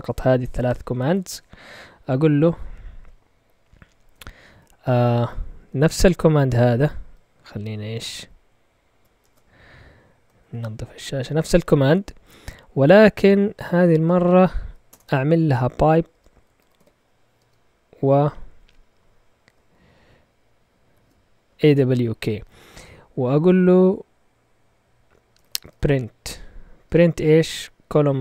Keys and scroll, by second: 2.4 Up, 9.2 shift+super+z, 10.4 ctrl+l, 14.9 typing, 16.1-17.4 typing, 18.4 typing, 19.3 Left, 19.9-21.5 typing, 25.1-26.8 typing.